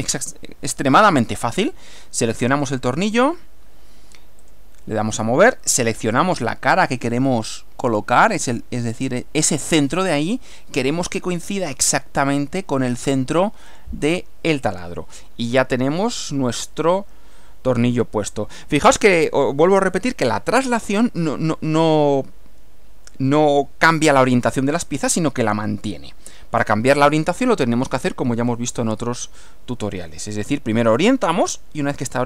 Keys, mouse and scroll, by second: 2.5 click, 4.4 click, 5.5-6.5 middle drag, 9.7 click, 10.5-11.9 middle drag, 13.7 click, 14.7 click, 15.1-19.0 middle drag, 26.6-28.9 middle drag, 29.4-30.5 middle drag.